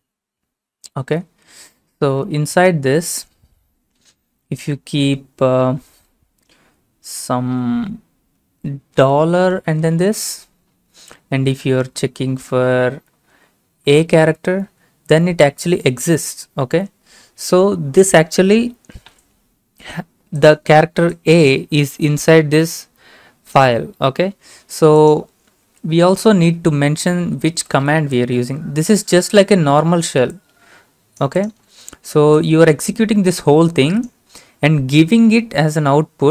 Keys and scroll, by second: 0.2 Left, 0.3-1.5 Left, 1.5 Right, 2.1 shift+0, 2.5 Left, 3.0 Left, 3.1 Left, 3.4 Left, 4.3 BackSpace, 4.4 BackSpace, 5.0 BackSpace, 9.0 $, 9.5 (, 13.9 a, 26.3 Left, 27.3-28.5 typing.